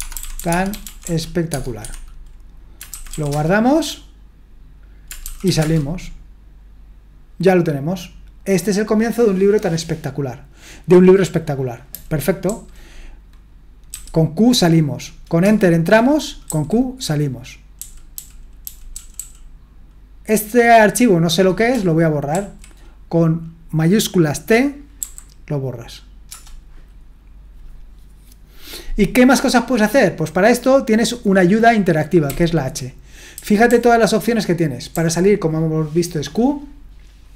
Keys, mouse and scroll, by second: 0.0-1.8 typing, 2.9-3.3 typing, 5.2-5.9 typing, 11.9-12.4 typing, 13.7-14.4 typing, 15.4 Return, 16.5 typing, 17.5-19.6 typing, 25.0 typing, 26.3 Return, 32.2 typing, 33.3-33.7 typing.